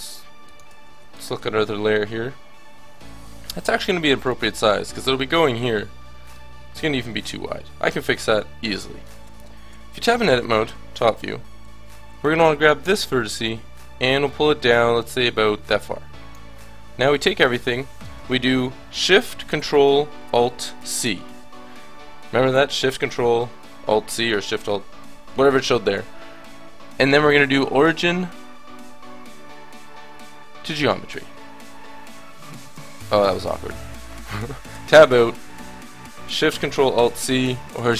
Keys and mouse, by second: 4.3-6.1 drag, 9.3 ctrl+z, 9.7 Tab, 10.6 KP_7, 11.6 a, 12.1 b, 14.7 click, 16.5 a, 17.1 a, 20.8 ctrl+alt+shift+c, 32.6 click, 33.0-34.5 middle drag, 34.7 Tab, 36.9 ctrl+alt+shift+c.